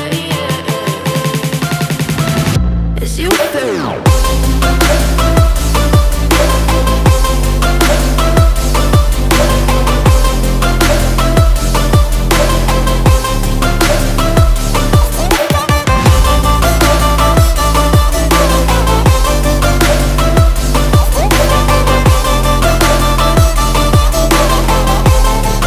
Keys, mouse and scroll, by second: 0.3 click, 0.6-1.0 scroll up 1, 3.6 click, 4.1 scroll up 1, 4.5 click, 4.9 scroll down 1, 5.6 double click, 7.0 click, 7.5 click, 11.5-11.8 scroll down 1, 11.8 click, 14.1 click, 15.0 click, 15.9 click, 17.3 click, 17.9 click, 18.2 double click, 20.6 click, 21.4 click, 24.1 click.